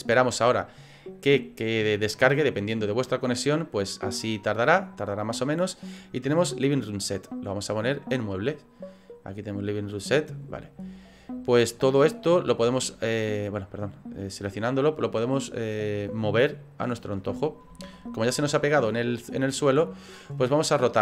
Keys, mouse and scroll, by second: 7.3 click, 10.4 click, 12.4 click, 17.9 ctrl+z.